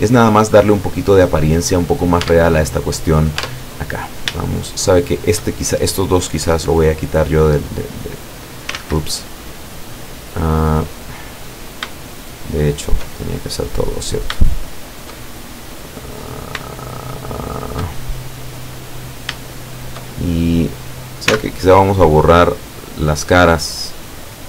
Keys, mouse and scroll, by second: 1.5-2.2 drag, 2.3 Tab, 2.9 middle click, 3.0 right click, 3.5 Tab, 4.1 right click, 4.6 shift+right click, 5.9-7.0 shift+middle drag, 7.7-8.9 drag, 8.8 ctrl+z, 12.3 shift+right click, 12.7 shift+right click, 13.1 shift+middle click, 14.5 shift+right click, 14.9 shift+right click, 15.3-16.4 shift+middle drag, 16.9 shift+right click, 17.4 shift+right click, 17.9-19.8 shift+middle drag, 19.6 shift+right click, 20.2 shift+scroll down 1, 21.3 x, 22.8 click, 23.6 middle click.